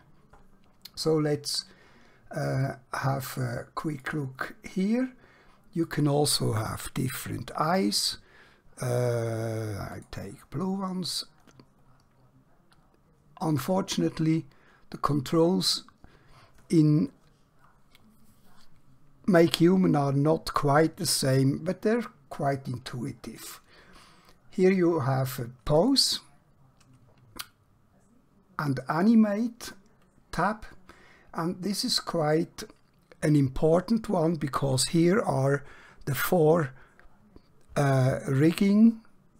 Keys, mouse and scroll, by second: 4.0 click, 10.5 click, 11.0-11.5 scroll up 1, 11.5-12.8 scroll down 1, 12.8-13.6 scroll up 1, 13.6-16.0 scroll down 1, 25.8 click.